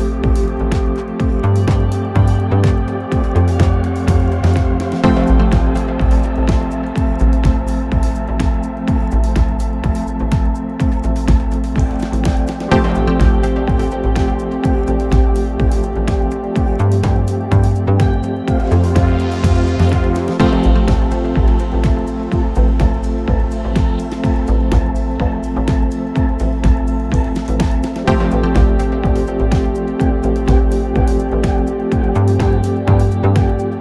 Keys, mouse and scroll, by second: 3.3-5.6 drag, 6.0-7.1 drag, 8.3-10.0 scroll up 1, 10.0-14.5 shift+middle drag, 14.5-15.8 drag, 17.5-19.2 shift+scroll down 5, 19.2-19.6 shift+scroll down 1, 20.0-20.3 shift+scroll down 6, 20.9-21.7 shift+scroll up 2, 25.0-26.2 ctrl+scroll down 4, 26.2-26.8 ctrl+scroll down 4, 27.5-28.2 ctrl+scroll down 10, 28.4-30.4 scroll up 17, 30.4-31.8 ctrl+scroll up 9, 32.1-33.0 ctrl+scroll up 2, 33.3-33.8 scroll up 5.